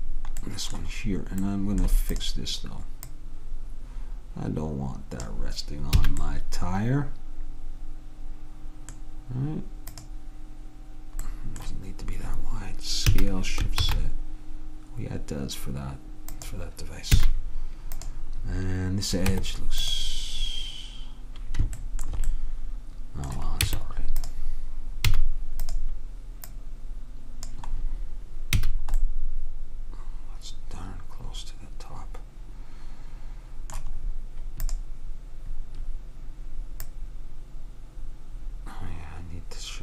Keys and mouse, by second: 2.2-5.1 drag, 6.1 a, 10.0-11.9 drag, 13.2 s, 17.3 a, 18.0-19.7 drag, 19.4 Tab, 21.6 click, 23.7 Tab, 24.4 Tab, 25.2 a, 25.8 click, 28.7 a, 34.7-36.5 drag, 36.9-38.7 drag.